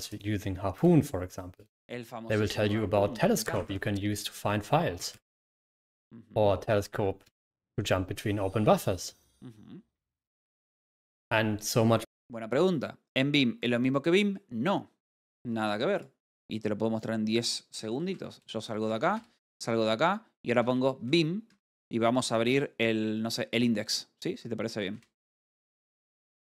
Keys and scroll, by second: 18.2-19.1 typing, 24.9 space, 25.1 Tab.